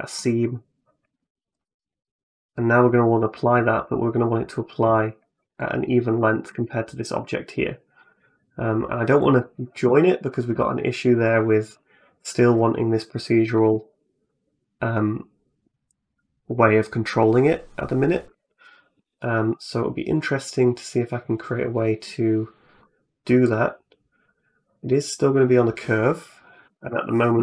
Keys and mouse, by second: 0.0 middle click, 1.3 right click, 2.3 right click, 2.8 middle click, 5.7 right click, 6.0 shift+middle click, 7.9 right click, 10.4 click, 10.9 click, 11.5 right click, 12.8 click, 13.8-18.1 shift+drag, 19.0 right click, 21.9 middle click, 23.2 right click, 24.1 right click, 26.5 g.